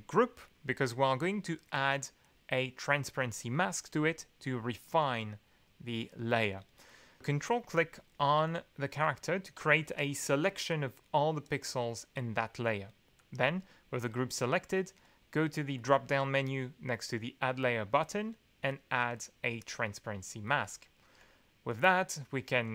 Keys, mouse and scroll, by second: 3.8 click, 7.5 ctrl+click, 13.2 click, 15.7 click, 19.0 click, 21.7 click.